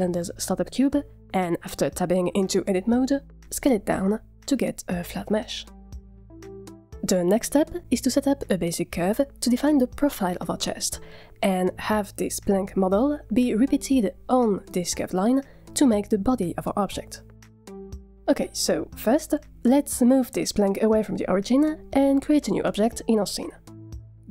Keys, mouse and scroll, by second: 0.0-1.8 typing, 1.9 Tab, 2.3 click, 2.6-4.0 middle drag, 5.6-5.9 scroll down 1, 19.6 click, 20.0 g, 20.9 click, 22.9 shift+a.